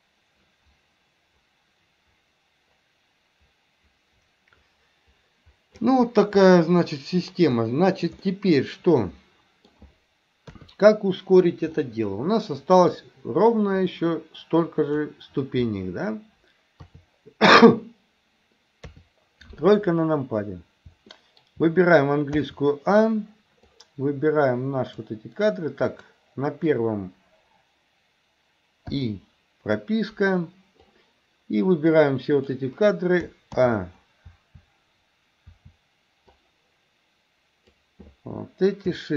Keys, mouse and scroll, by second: 6.4-7.4 middle drag, 8.3-9.7 middle drag, 10.5 KP_3, 11.8-13.0 middle drag, 13.8-15.1 drag, 16.8 KP_3, 21.2 shift+middle click, 22.4 a, 23.7-25.0 drag, 25.9 click, 29.0 i, 30.9-32.6 drag, 33.6 a, 34.4 a, 35.5 a, 36.4-37.9 drag.